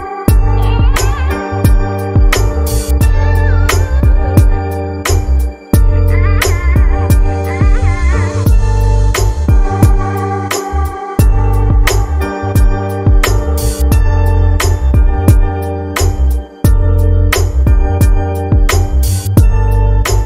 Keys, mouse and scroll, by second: 6.7 click, 8.8-15.9 drag, 16.1-17.4 scroll down 10, 17.4-19.2 scroll up 4, 19.2-19.6 drag, 19.6-20.2 scroll down 10.